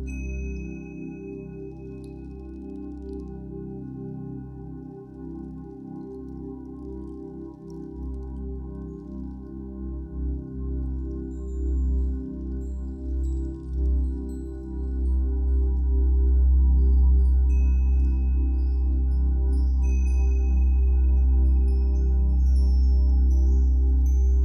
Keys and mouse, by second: 0.0 click, 1.1 shift+d, 1.5 click, 4.3 click, 5.0 click, 7.5-11.2 drag, 11.6-20.6 alt+shift+drag, 21.3-21.9 alt+drag.